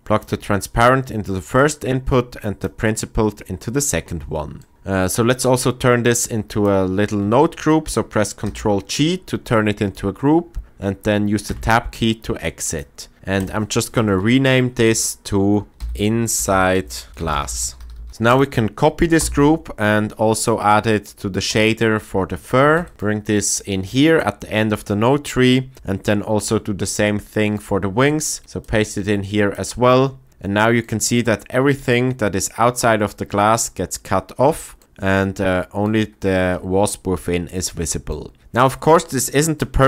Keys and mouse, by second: 1.5-2.6 drag, 8.4 ctrl+g, 9.5 middle click, 11.4 Tab, 13.4-16.8 drag, 17.1 BackSpace, 17.9 s, 19.2 ctrl+c, 22.8 ctrl+v, 28.4 ctrl+v, 28.6 click, 29.5 middle click, 30.3 middle click, 30.5 middle click, 37.2 middle click, 38.2 shift+middle drag.